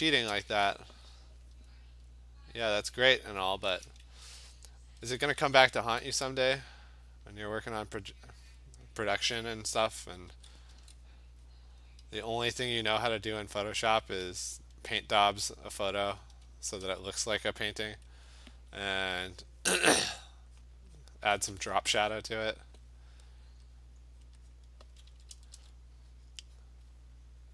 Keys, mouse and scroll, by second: 0.4 alt+click, 2.9-8.0 alt+click, 4.5 ], 5.0 [, 5.2 [, 6.8 click, 7.1 click, 7.4 click, 7.6 click, 7.9 click, 8.1 ], 8.4 click, 8.6 click, 9.4 ], 10.0 ], 10.3 ], 10.7 ], 11.1 click, 11.5 click, 12.1 click, 12.3 click, 12.8 click, 13.2 click, 13.5 click, 13.8 click, 14.2 ], 14.4 ], 14.9 click, 15.3 click, 15.5 click, 15.7 ], 15.8 click, 16.0 click, 16.2 ], 16.5 ], 16.9 ], 17.4 click, 17.6 click, 17.8 click, 19.0 [, 20.0 click, 20.4 click, 20.7 click, 21.1 click, 21.3 click, 21.4 ], 21.6 ], 21.8 ], 22.2 click, 22.5 click, 24.2 click, 24.5 click, 24.8 [, 25.1 [, 25.3 [, 25.5 [, 26.2 click, 26.7 click.